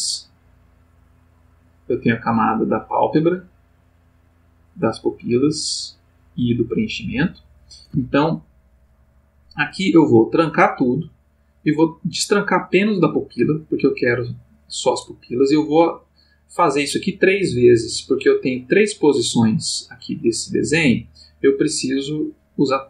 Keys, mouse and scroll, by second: 0.1 click, 0.7 click, 1.2 click, 2.6 click, 3.0 click, 4.7 click, 5.1 click, 6.6 click, 7.0 click, 10.4-11.5 drag, 12.2 click, 16.0-22.4 drag.